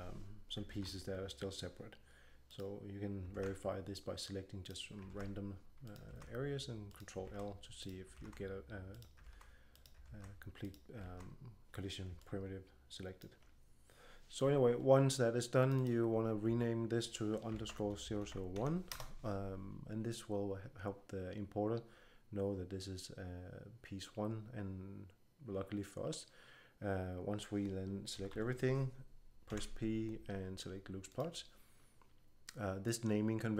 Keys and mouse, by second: 0.6 ctrl+l, 2.4-7.2 right drag, 3.3 ctrl+l, 5.0 ctrl+l, 6.0 ctrl+l, 7.2 ctrl+l, 8.1 ctrl+l, 9.2 ctrl+l, 10.0 ctrl+l, 10.9 ctrl+l, 12.6-14.1 drag, 15.5-17.6 drag, 18.1 0, 28.1 a, 28.2 a, 29.4 p.